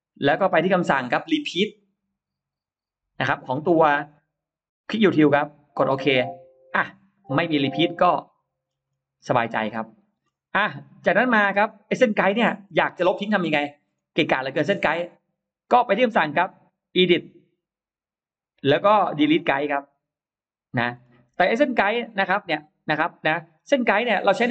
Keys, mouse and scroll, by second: 1.0 click, 5.0 click, 6.5 click, 7.5 click, 8.1 middle click, 8.7-9.4 scroll up 2, 9.3 middle click, 10.1-10.4 scroll down 2, 10.5-11.5 scroll up 1, 13.0 middle click, 13.7-14.1 scroll down 1, 14.1 middle click, 16.8 click, 19.9 click, 20.8 middle click, 21.0 scroll down 2, 21.5-21.9 scroll up 2, 21.7-23.6 middle drag, 22.8-23.1 scroll down 2, 23.6-24.3 scroll down 1, 24.1 middle click.